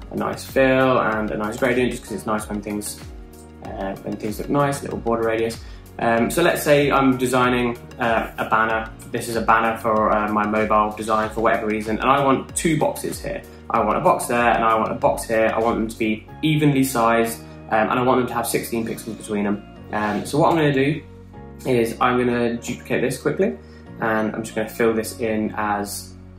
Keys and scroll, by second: 1.9 8, 2.0 Return, 6.5 typing, 12.9 r, 14.5 super+d, 20.9 BackSpace, 23.1 super+d.